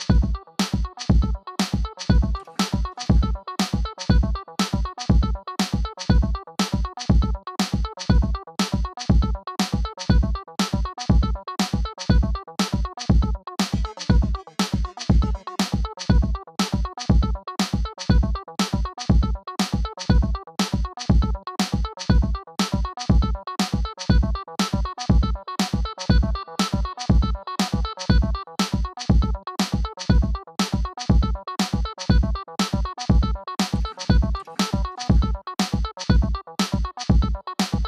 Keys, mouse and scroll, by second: 1.4 scroll up 1, 1.8 click, 3.5 click, 15.1 Return, 17.4 ctrl+z, 17.6-20.2 drag, 21.0 click, 22.5 click, 26.1-28.9 typing, 29.9 ctrl+a, 31.1 click, 32.9 scroll down 1, 34.0 c, 35.9 click.